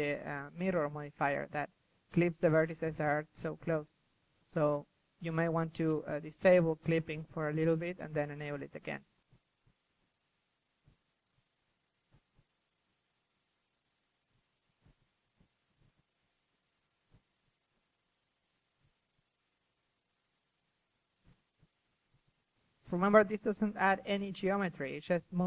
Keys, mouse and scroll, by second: 3.0-4.3 drag, 3.9 ctrl+z, 4.1 f, 4.5 click, 5.0 ctrl+z, 5.1 drag, 5.7 ctrl+z, 6.0 ctrl+z, 6.3 ctrl+z, 6.9 KP_1, 7.4 f, 7.6 drag, 8.0 click, 8.1 KP_3, 11.2 KP_1, 11.6-12.5 drag, 13.9 click, 13.9 KP_3, 14.8-15.8 drag, 19.6 middle drag, 19.9 KP_3, 20.3-21.0 drag, 21.1-21.6 drag, 21.6 middle drag, 21.8-22.4 drag, 22.4 ctrl+z, 22.6 ctrl+z, 23.2-24.3 drag, 24.3-25.0 middle drag, 25.0-25.4 drag.